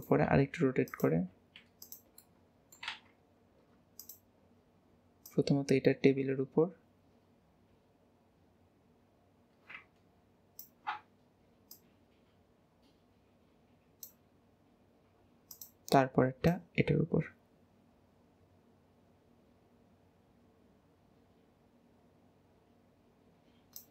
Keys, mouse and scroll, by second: 2.3-2.9 middle drag, 2.9 alt+z, 3.2-4.0 scroll up 2, 4.0 click, 5.2 click, 9.9 ctrl+click, 11.7 click, 14.7-15.5 scroll up 3, 15.5 click, 16.5 click.